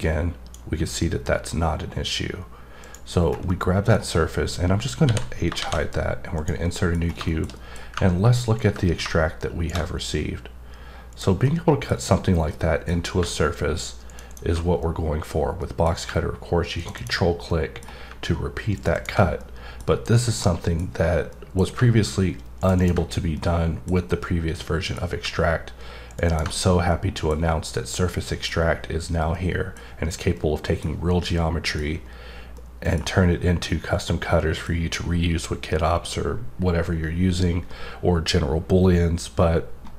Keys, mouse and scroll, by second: 2.8 click, 3.2 scroll down 2, 3.5 middle click, 6.4 click, 6.7 middle click, 7.0 scroll up 1, 7.3 middle click, 7.5 double middle click, 8.5 click, 11.1 click, 11.4 middle click, 12.5 middle click, 14.1 click, 14.3 double click, 14.8 middle click, 15.6 middle click, 16.8 click, 16.9 double click, 17.5 middle click, 18.7 click, 18.9 double click, 19.4 middle click, 20.4 middle click, 21.3 middle click, 22.6 click, 22.8 double click, 23.3 middle click, 24.1 middle click, 26.1 click, 26.2 double click, 26.9 middle click, 28.1 middle click, 29.3 middle click, 30.4 middle click, 31.3 middle click, 32.6 middle click, 33.7 middle click.